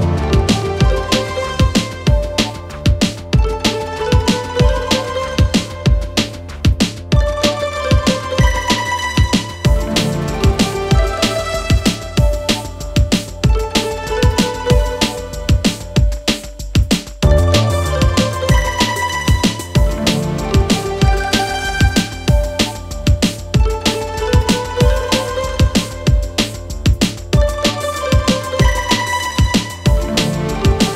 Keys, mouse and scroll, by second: 0.4 alt+scroll up 1, 0.6 space, 0.7-1.1 click, 0.9 space, 1.4 click, 2.0 alt+scroll up 1, 2.4-3.4 click, 3.6 BackSpace, 5.3 click, 6.6 alt+scroll down 1, 7.0-8.8 drag, 8.8 click, 9.7 alt+scroll down 2, 9.9-10.3 click, 10.2 space, 13.0 click, 19.2 click, 21.2 click, 26.2 click, 26.2 click, 30.3 click.